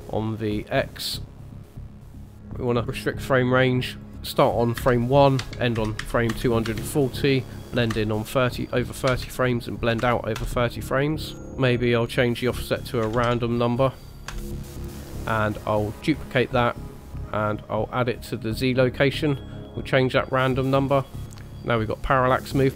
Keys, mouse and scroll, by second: 1.0 click, 1.6 click, 2.0 scroll down 4, 2.6 click, 2.8 click, 3.3 scroll down 1, 4.0 click, 11.3 scroll up 2, 11.6 click, 16.0 click, 17.7 click, 19.1 click, 20.2 click.